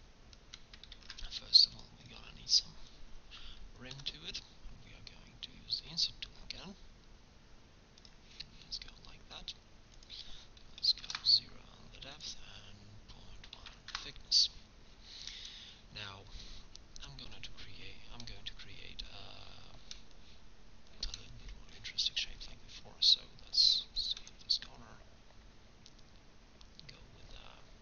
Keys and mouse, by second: 1.0 ctrl+Tab, 4.0 i, 10.0-11.9 drag, 12.2-13.9 drag, 14.5-15.7 middle drag, 17.3 k, 18.1 middle click.